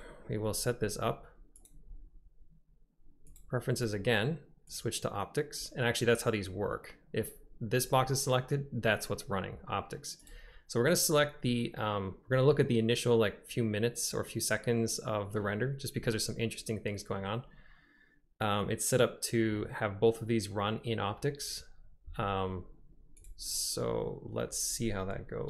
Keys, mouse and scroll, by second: 1.7-3.5 drag.